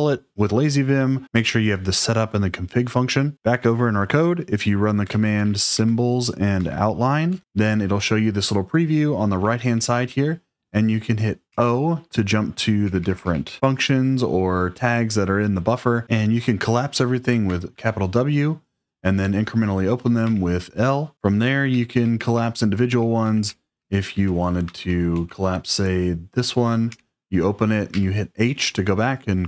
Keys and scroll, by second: 5.0 shift+;, 5.4 shift+s, 5.8 Tab, 6.6 Tab, 7.2 Return, 10.0 typing, 22.6-23.9 typing.